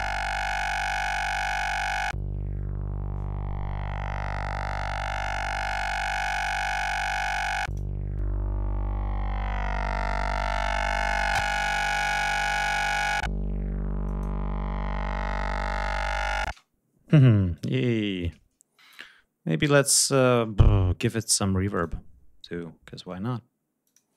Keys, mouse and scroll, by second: 5.5 click, 6.1 click, 7.2 click, 7.5 click, 10.2 click, 13.9 click, 16.3 space, 17.4 right click, 19.8-20.5 scroll down 1, 21.6 click, 23.7 click, 24.0 space.